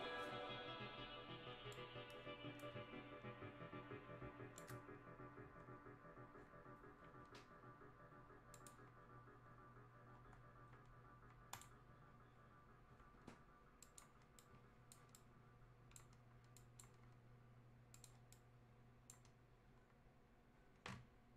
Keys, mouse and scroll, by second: 1.7-5.0 drag, 5.0-5.4 scroll down 1, 6.0-7.4 scroll up 1, 8.5 click, 9.1-9.4 scroll down 1, 11.5 click, 12.3-13.4 scroll down 1, 13.8-19.8 drag, 19.8-20.2 scroll up 1.